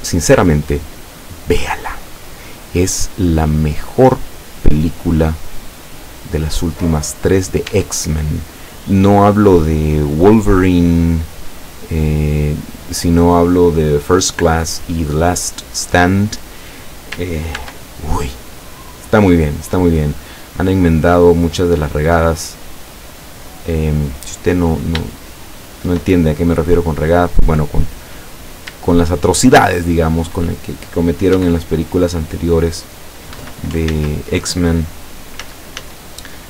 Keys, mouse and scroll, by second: 2.1 scroll down 1, 2.6-4.0 middle drag, 5.5-7.0 middle drag, 7.0-7.5 scroll up 2, 7.7 Tab, 17.6 ctrl+r, 19.3 click, 23.8 click, 24.2-24.6 scroll up 2, 25.1-26.1 shift+middle drag, 27.1 click, 28.3 right click, 29.9 shift+right click, 31.4 e, 33.4 Escape, 33.9 ctrl+z, 35.4 z.